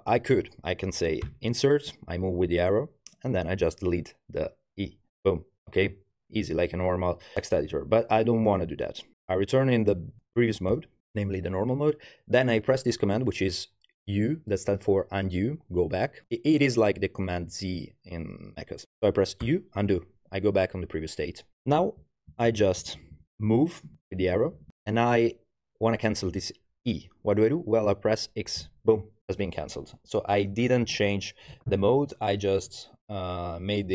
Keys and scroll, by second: 1.9 Tab, 2.5 Right, 3.0 Right, 3.1 Right, 3.1 Right, 3.2 Right, 5.1 BackSpace, 19.5 u, 21.6 Left, 21.8 Left, 22.5 Left, 22.6 Left, 23.0 Left, 23.2 Left, 23.3 Left, 23.9 Right, 23.9 Right, 24.2 Right, 24.4 Right, 24.5 Right.